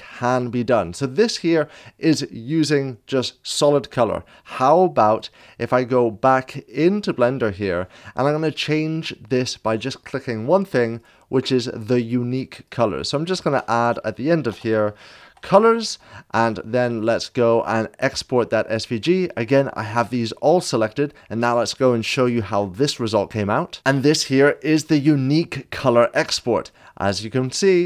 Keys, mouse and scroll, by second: 5.1 click, 12.7 click, 13.8 Right, 14.5-15.8 typing, 17.0 s, 17.7 click, 27.2-27.7 alt+scroll down 2, 27.7 alt+scroll down 1.